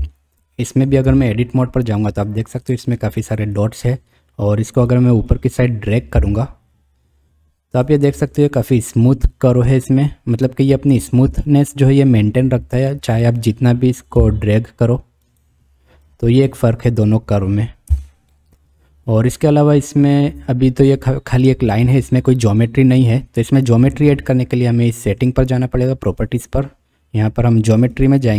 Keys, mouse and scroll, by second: 1.1 Tab, 2.4 click, 3.1 click, 3.7 click, 4.7 click, 5.3 click, 6.1 g, 13.0 click, 14.2 g, 16.1 click, 17.9 Tab, 18.3-19.6 middle drag, 27.9 middle click.